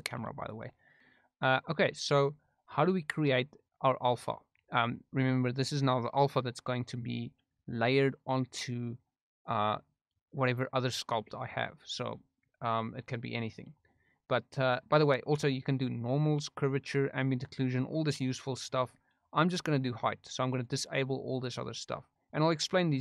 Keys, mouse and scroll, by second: 0.0 g, 0.3 right click, 0.6 middle click, 13.6-14.7 drag, 20.6 click, 21.3 click.